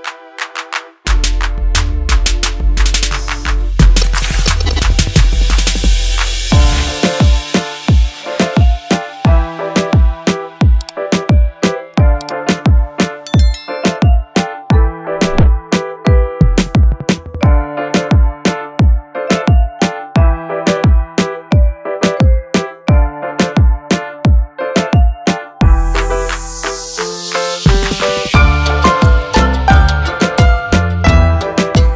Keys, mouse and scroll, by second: 1.2 scroll down 1, 3.2 click, 4.4 click, 8.9 F9, 13.8 scroll down 1, 14.9 click, 15.8 click, 18.0 click, 20.9 F4, 22.2 F9, 24.0 click, 26.8 F4.